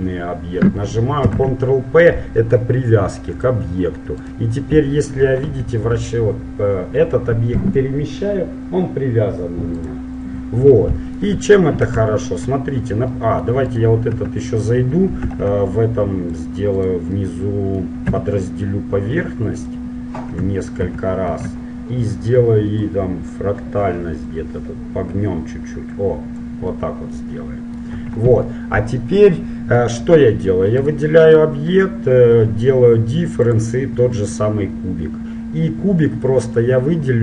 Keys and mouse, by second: 1.3 ctrl+p, 4.3-6.1 right drag, 5.7 g, 10.7-13.5 middle drag, 13.9 click, 14.3 Tab, 15.4 ctrl+Tab, 15.4 right click, 17.5 middle click, 18.2 w, 20.9 shift+r, 21.3 shift+r, 22.9-26.3 drag, 26.8-27.8 middle drag, 28.1 Tab, 29.5 middle click, 30.9-32.7 drag, 33.6-36.6 drag.